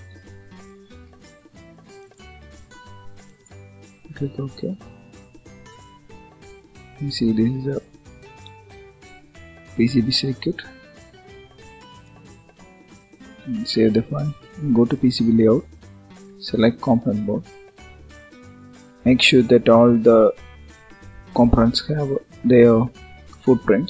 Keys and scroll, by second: 13.1 ctrl+s.